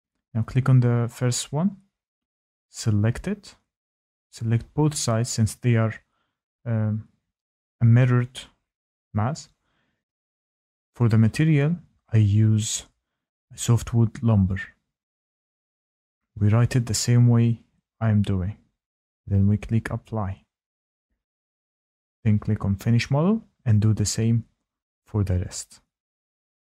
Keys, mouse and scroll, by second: 2.2 Tab, 2.8 click, 3.2 middle click, 3.3 middle click, 3.8 middle click, 4.4 ctrl+click, 7.8 click, 10.4 click, 14.1-17.5 typing, 23.5 click, 23.6-24.0 scroll, 24.2-25.7 scroll, 25.7 Tab, 25.7 scroll, 26.0 Tab, 26.2 Tab, 26.2 middle click, 26.3 Tab, 26.3 Tab, 26.3 click, 26.6 click, 26.6 click, 26.7 click, 26.7 click.